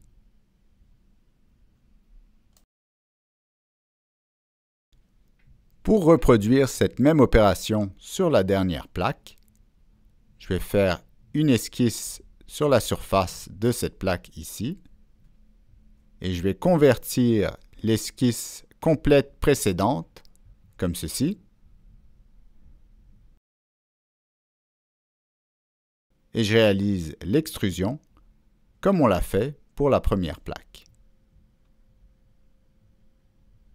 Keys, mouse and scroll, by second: 2.2 click, 3.8 click, 6.2 click, 9.5 click, 12.7 click, 13.9 click, 16.5 click, 18.8 click, 20.6 click, 23.1 click, 29.0 click, 31.1 middle click, 31.9 click, 33.3 click.